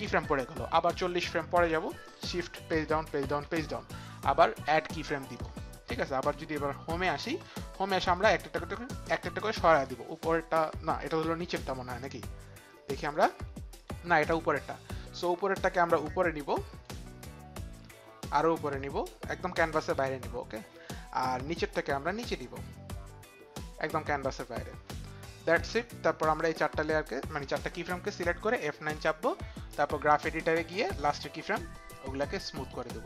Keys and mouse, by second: 2.6 shift+Page_Down, 3.1 shift+Page_Down, 3.4 shift+Page_Down, 7.3 click, 9.4 click, 13.7 click, 15.1 click, 16.0 shift+click, 18.6 click, 21.5 click, 22.5 click, 29.7 click, 30.7 click, 31.9 click.